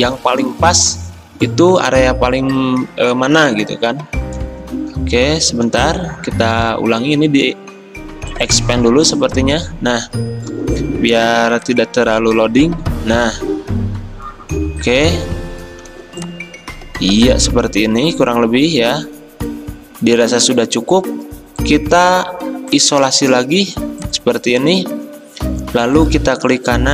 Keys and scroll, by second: 5.9 ctrl+z, 10.5 v, 12.9 typing, 15.9 v.